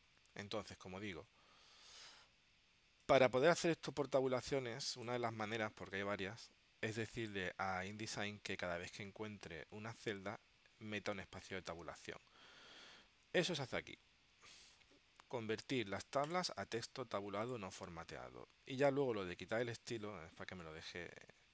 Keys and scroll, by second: 13.4 super+Right.